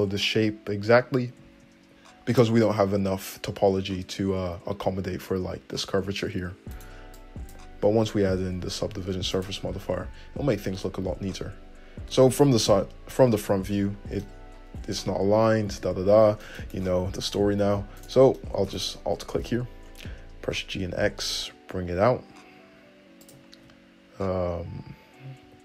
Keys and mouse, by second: 7.0 click, 7.0 middle click, 7.4-9.8 drag, 8.4 g, 9.8-13.7 middle drag, 10.1 `, 12.4 Tab, 13.6 alt+z, 15.1 `, 16.3 Tab, 16.8 `, 17.6 g, 18.4 middle click, 19.0 alt+click, 19.1-25.6 alt+middle drag, 19.7 `, 20.7 g, 23.8 `.